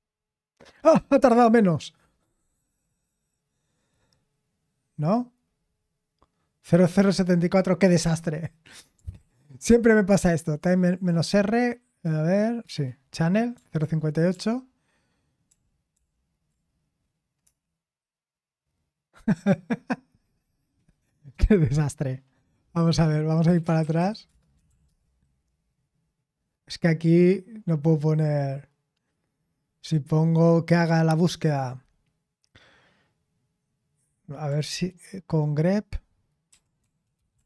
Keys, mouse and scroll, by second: 2.1-5.4 scroll up 2, 5.4-7.2 scroll up 1, 7.2-8.1 scroll up 1, 8.1-8.9 scroll up 1, 8.9 scroll up 1, 9.2 ctrl+p, 12.6 Return, 13.8 ctrl+p, 14.3 ctrl+p, 15.5 ctrl+p, 15.9 ctrl+p, 17.4 Return, 23.4-25.2 typing, 36.9-37.4 typing.